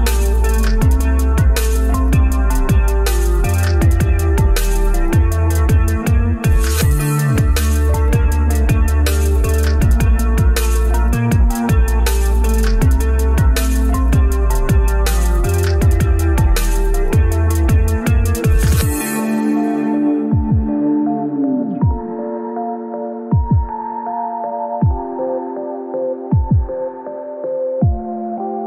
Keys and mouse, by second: 0.2-0.8 middle drag, 1.1 Tab, 1.9 middle click, 3.6 shift+Tab, 3.7-4.1 shift+middle drag, 5.4 alt+z, 6.2 click, 6.8 click, 7.2 click, 7.7 click, 9.1-10.8 middle drag, 12.5 ctrl+z, 12.7 ctrl+z, 14.6 ctrl+z, 16.7 ctrl+shift+z, 18.9 ctrl+KP_Add, 20.1 g, 24.1 ctrl+z, 24.3-26.2 ctrl+z, 26.4 ctrl+shift+z, 26.5 ctrl+shift+z, 28.4 shift+d.